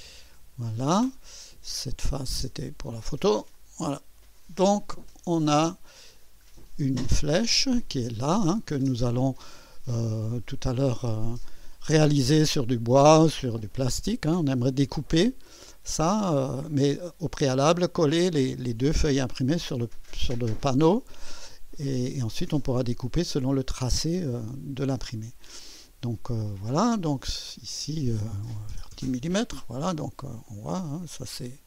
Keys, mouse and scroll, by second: 1.9 click, 2.4 space, 3.6-4.8 drag, 5.1 scroll up 1, 6.2 scroll down 1, 6.7 click, 8.3 click, 27.4 click, 28.3-29.2 typing, 30.0 click, 30.5-31.6 drag.